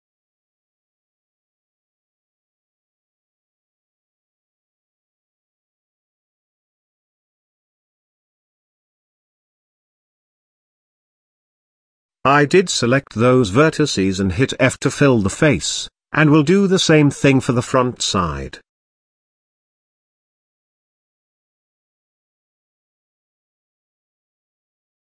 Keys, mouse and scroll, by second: 0.3 click, 1.2 KP_3, 1.7 KP_1, 2.1 KP_Decimal, 3.0 z, 4.5 click, 5.2 g, 6.6 click, 7.2 g, 9.9-10.5 scroll down 1, 10.5 click, 11.6 f, 12.1 click, 12.7 f, 13.1 z, 13.4-14.4 middle drag, 14.4-15.2 scroll down 3, 15.2 KP_1, 15.6-15.9 scroll up 7, 15.9 z, 16.6 click, 17.2 g, 19.1-19.8 scroll down 7, 19.3 z, 19.8 middle click, 20.4 scroll down 3, 20.6-20.9 shift+middle drag, 20.9 scroll up 2, 21.1-22.5 middle drag, 22.5 KP_1, 22.9 click, 23.3 z, 23.6 shift+middle click, 23.8-24.3 scroll up 6, 24.3 click.